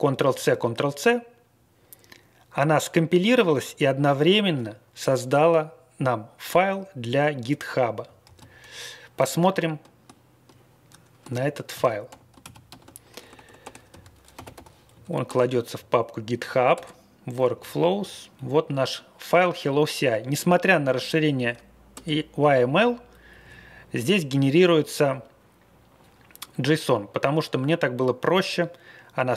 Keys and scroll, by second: 0.1 ctrl+c, 0.5 ctrl+c, 8.3 ctrl+x, 9.5 ctrl+f, 11.3 ctrl+g, 11.7 ctrl+x, 12.4 ctrl+x, 12.6 ctrl+f, 13.1-15.0 typing, 15.2 Return, 15.7 Down, 16.1 Down, 16.7 Return, 17.4 Tab, 17.5 Down, 17.7 Down, 17.9 Tab, 18.3 Tab, 21.9 Return, 23.2 Down, 23.4 Down.